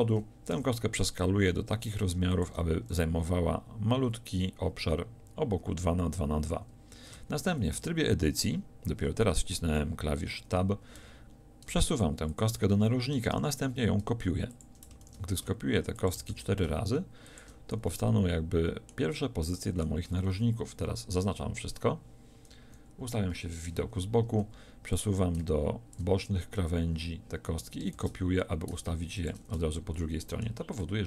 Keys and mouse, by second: 0.5 s, 2.4-3.7 drag, 7.1 Tab, 11.0 g, 13.3 shift+d, 15.0 shift+d, 16.3 shift+d, 20.1 a, 20.3 a, 22.5 KP_1, 23.0 KP_3, 27.9 shift+d.